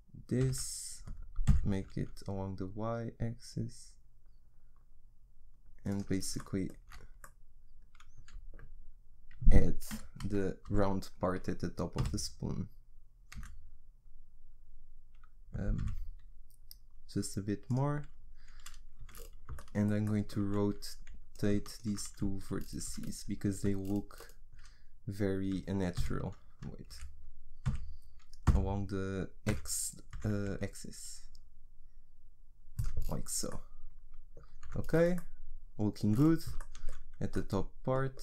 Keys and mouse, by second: 6.9 z, 10.2 KP_1, 10.7 KP_3, 12.0 g, 19.5-21.3 middle drag, 21.3-23.6 drag, 23.6 r, 27.7 r, 33.1-34.6 middle drag, 34.6 Tab.